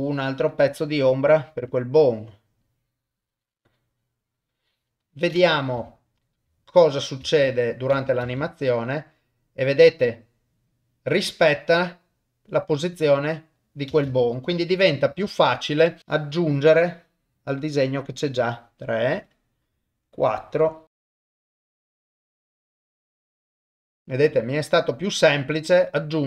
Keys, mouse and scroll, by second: 1.7 click, 2.6-4.9 drag, 5.8 shift+middle click, 8.2 shift+space, 13.9 shift+space, 14.6 shift+Left, 15.3 shift+middle click, 16.0 click, 16.2 click, 16.3 click, 16.5-18.0 drag, 19.3 click, 20.3 click, 21.3 click, 21.5 click, 22.1 click, 22.7 click, 23.2 click, 23.8 ctrl+middle click, 23.9 shift+space.